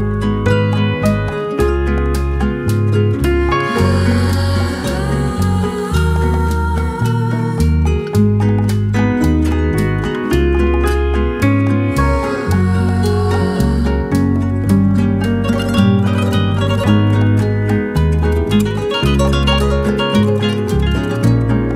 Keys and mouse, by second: 7.7 shift+middle click, 8.2 shift+middle click, 9.7 k, 19.1 shift+middle click, 19.7 shift+middle click, 20.1 shift+middle click, 20.8 shift+middle click, 21.3 shift+middle click.